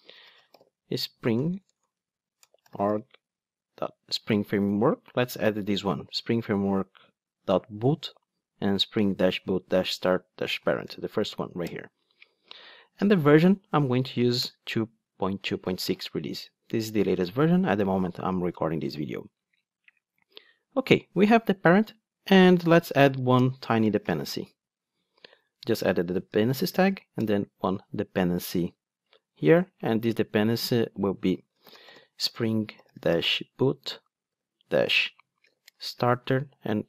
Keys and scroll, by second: 12.0 Return, 25.2 Return.